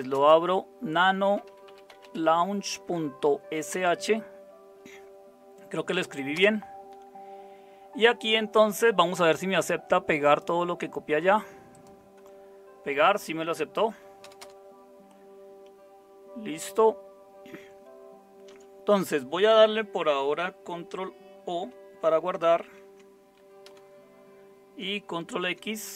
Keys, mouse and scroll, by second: 0.0-4.2 typing, 6.3 Return, 14.2 Return, 14.4 Return, 17.6 Up, 22.6 ctrl+o, 23.7 Return, 25.3 ctrl+x.